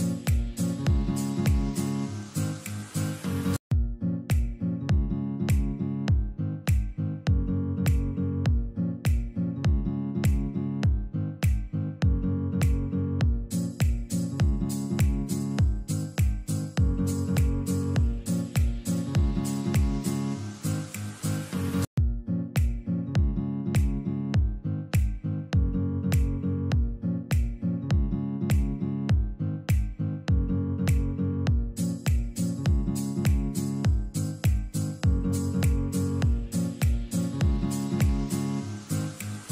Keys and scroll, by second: 4.6 F3, 4.8 Escape, 5.8 ctrl+r, 6.4 Escape, 8.6 Escape, 11.4 shift+Page_Up, 14.6 ctrl+r, 15.3 Escape, 16.2 alt+c, 17.0 Escape, 18.7 F2, 19.8 Escape, 21.8 shift+F2, 22.2 F3, 22.2 Escape, 26.7 F3, 31.0 F2.